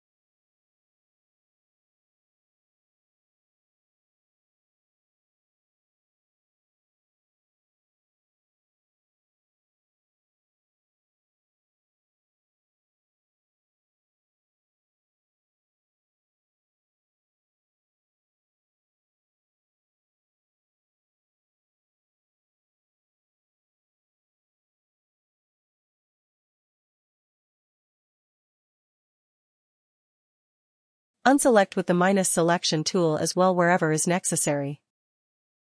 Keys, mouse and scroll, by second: 34.6 ctrl+-, 34.8 ctrl+-.